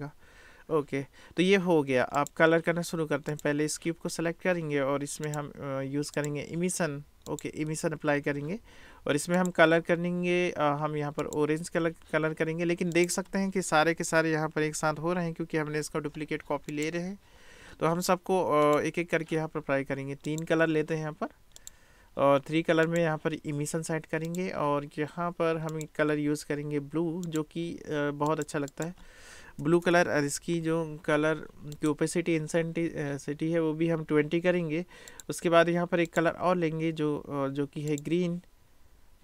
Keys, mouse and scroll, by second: 2.3 drag, 3.4 click, 5.2 click, 6.2-8.0 drag, 9.4 click, 13.1-16.8 drag, 18.6 click, 20.3 click, 22.0-24.4 drag, 25.7 click, 28.7-31.9 drag, 29.8 BackSpace, 35.2-36.6 drag, 38.0-39.2 drag.